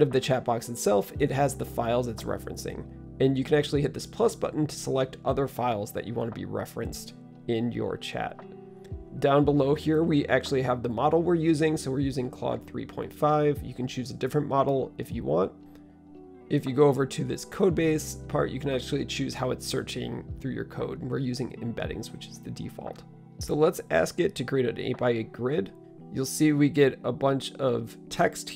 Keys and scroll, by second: 23.8-25.2 typing.